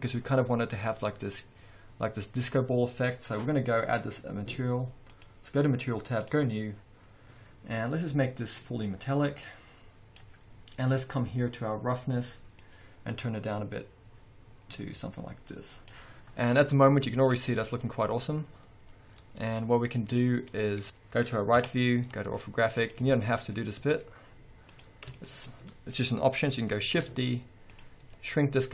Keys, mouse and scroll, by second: 1.0-4.8 scroll up 2, 6.4 click, 9.0-16.6 drag, 10.7 scroll down 1, 18.3 click, 19.5 z, 20.7-21.1 drag, 20.7 scroll down 2, 20.8 scroll up 1, 21.7 KP_3, 23.2 z, 23.4-24.0 scroll up 1, 24.0 z, 25.3-25.7 scroll up 3, 25.4-28.0 shift+middle drag, 27.0 shift+d, 28.0 click, 28.2 s.